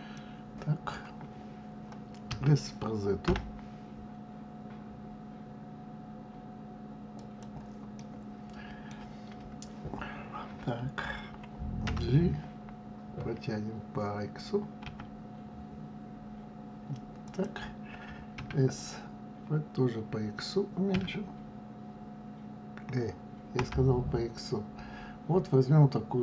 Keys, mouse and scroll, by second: 0.1-2.3 middle drag, 2.3 s, 8.0-11.0 middle drag, 11.8 g, 18.4 s.